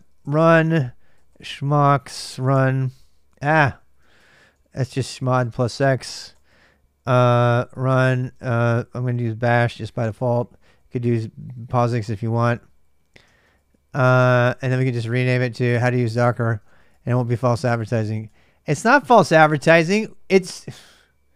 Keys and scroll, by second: 0.0-14.0 typing, 8.8 shift+Delete, 8.9 shift+Delete, 16.3-19.1 typing, 18.0 Return.